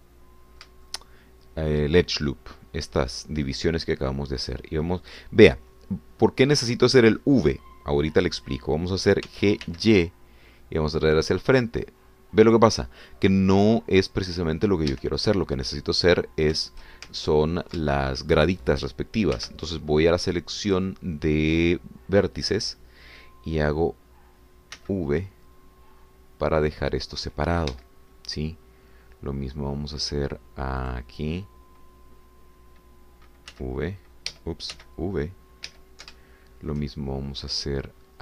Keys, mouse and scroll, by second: 0.2 scroll down 2, 0.8 middle click, 1.8-2.9 shift+drag, 4.9-10.3 drag, 10.3 g, 10.7 y, 15.9 Escape, 17.0-17.5 scroll up 4, 18.2 ctrl+shift+click, 18.3 ctrl+middle click, 18.9 ctrl+shift+middle click, 20.5 1, 21.7 click, 25.8 v, 28.8 Escape, 32.0 click, 34.5 c, 35.3 Escape, 35.8 v, 36.7 Escape, 37.2-38.2 shift+drag.